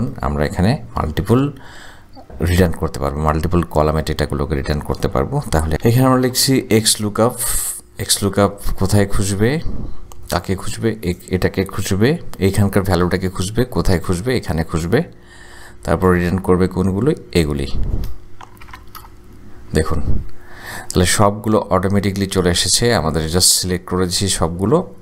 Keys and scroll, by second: 5.7-7.1 typing, 13.2 ,, 15.6 ,, 18.6 shift+0, 19.0 shift+Return.